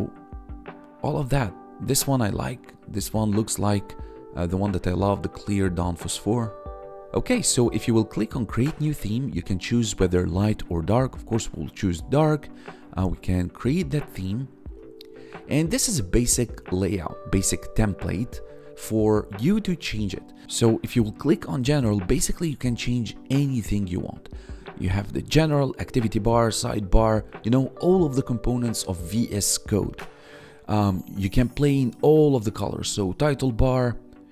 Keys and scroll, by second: 3.6 1, 6.7 1.